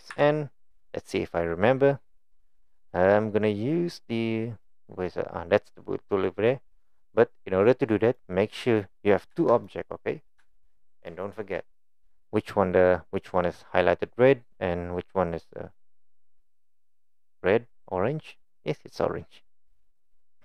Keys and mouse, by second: 0.1 n, 6.2 click, 8.1 drag, 8.7 click, 9.6-10.4 drag, 10.6-11.5 shift+drag.